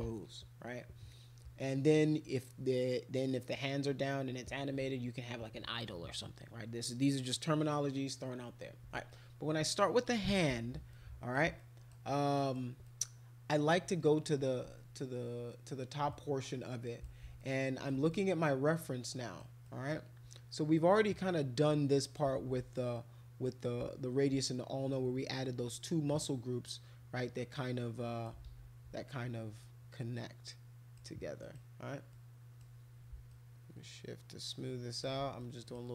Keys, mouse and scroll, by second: 9.1-10.3 drag, 10.9 alt+click, 11.6 alt+click, 12.4 alt+click, 12.8 click, 16.1 click, 17.4 alt+click, 18.1-19.4 drag, 19.7 click, 20.9-22.2 drag, 22.4 ctrl+z, 23.0 click, 26.1-28.3 drag, 28.4 ctrl+z, 29.6-30.9 drag, 31.4 click, 32.1 click, 33.3-35.0 shift+drag, 35.5 click, 35.8 click.